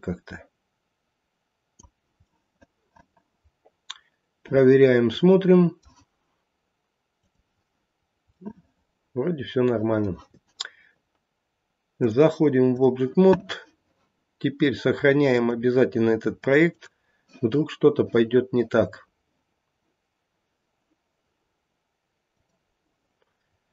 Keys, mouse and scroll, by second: 2.3 middle click, 2.7 middle click, 4.1 middle click, 4.8 middle click, 7.9 scroll down 1, 8.3 middle click, 11.9 click, 15.2 click, 23.4 scroll down 1.